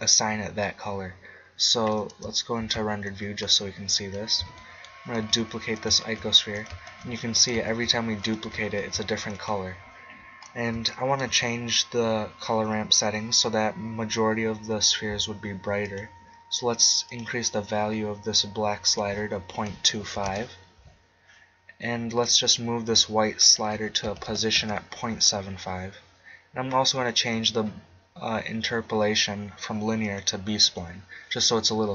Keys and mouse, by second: 2.6 shift+z, 4.0-5.3 drag, 5.3 shift+d, 5.9 click, 6.0 shift+d, 7.0 shift+d, 7.7 shift+d, 8.8 shift+d, 10.4-11.5 drag, 15.8-17.6 drag, 22.1-24.8 drag, 26.9-28.9 drag.